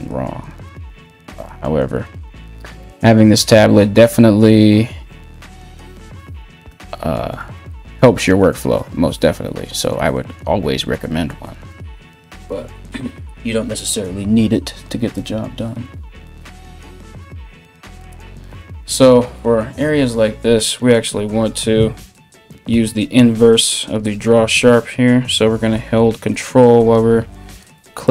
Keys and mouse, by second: 21.8 ctrl+z, 22.4 ctrl+z, 23.6 ], 23.7 ], 23.8 ], 24.1 ], 26.3 ctrl+".